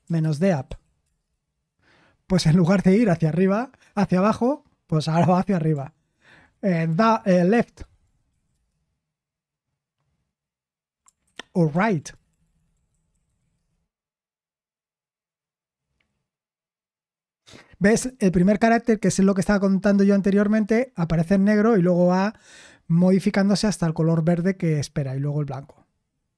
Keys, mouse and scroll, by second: 7.6-8.8 typing, 11.2 ctrl+c, 11.7 ctrl+c, 12.1 BackSpace, 12.5 BackSpace, 13.5 BackSpace.